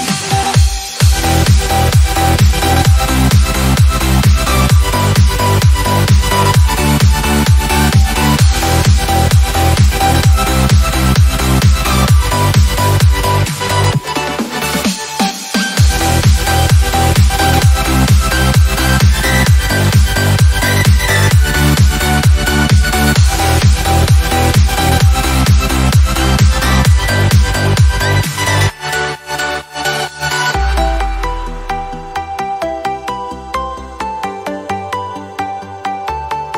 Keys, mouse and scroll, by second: 0.0-1.4 typing, 1.4 Return, 3.5 Return, 3.8 shift+5, 4.4 Return, 5.7-10.9 typing, 13.2-14.4 typing, 15.7 click, 17.6 click, 19.7 click, 20.4 click, 21.3-24.6 drag, 29.8-34.6 ctrl+alt+drag, 35.2 ctrl+d.